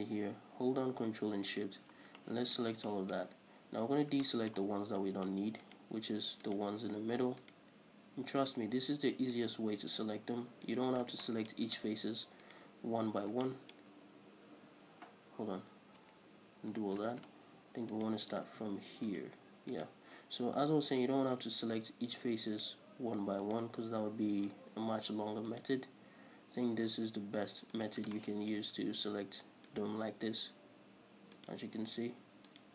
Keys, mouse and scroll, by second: 1.8 ctrl+shift+right click, 2.2 scroll down 1, 2.4-5.9 shift+middle drag, 4.1 scroll up 1, 5.9 alt+shift+right click, 6.7 alt+shift+right click, 7.6 alt+shift+right click, 8.7 alt+shift+right click, 9.6 alt+shift+right click, 10.9 alt+shift+right click, 11.5-12.7 shift+middle drag, 12.7 alt+shift+right click, 13.7-18.2 shift+middle drag, 15.6 ctrl+z, 17.0 ctrl+shift+z, 18.2 alt+shift+right click, 18.7 ctrl+z, 19.3 alt+shift+right click, 20.0 alt+shift+right click, 21.2 alt+shift+right click, 22.8 alt+shift+right click, 23.7 alt+shift+right click, 24.6 alt+shift+right click, 25.8 alt+shift+right click, 28.0 alt+shift+right click, 28.4-29.9 shift+middle drag, 29.9 alt+shift+right click, 31.6 alt+shift+right click.